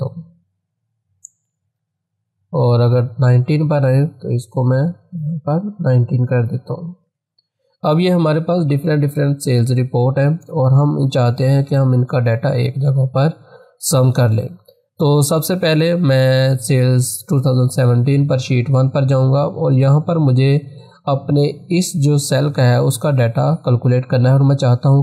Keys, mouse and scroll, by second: 1.8 8, 2.8-7.0 drag, 7.0 9, 10.0 click, 19.1 click.